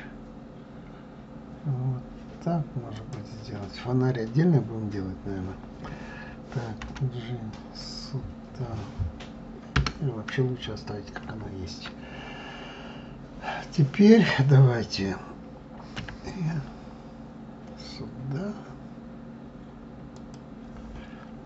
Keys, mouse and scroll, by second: 11.5 ctrl+z.